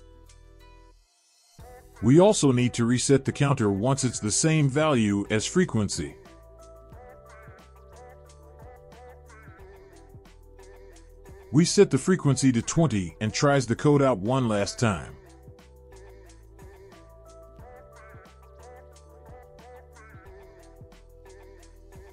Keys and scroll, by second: 2.7 ctrl+c, 4.1 Return, 4.3 ctrl+v, 6.0 ctrl+s, 11.9 ctrl+v, 13.0 ctrl+s.